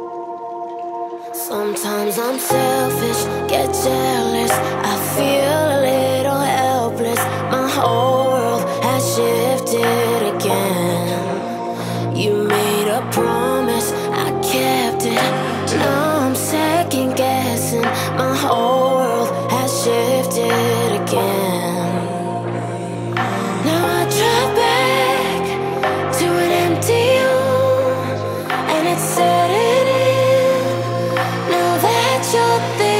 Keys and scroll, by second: 20.6 ], 20.7 ], 20.8 ], 31.3 [, 31.4 [, 31.4 [.